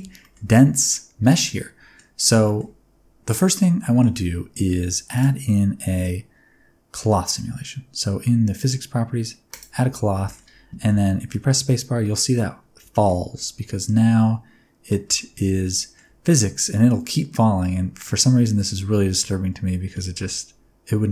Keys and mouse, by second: 0.2 shift+middle click, 0.5 middle click, 1.1 Tab, 1.4 middle click, 2.4 shift+middle click, 3.2 middle click, 9.5 click, 10.2 shift+middle click, 10.9 space, 11.3-11.7 middle drag, 12.0-12.4 middle drag, 12.9 shift+middle click, 13.4-14.9 middle drag, 15.2-16.0 shift+middle drag.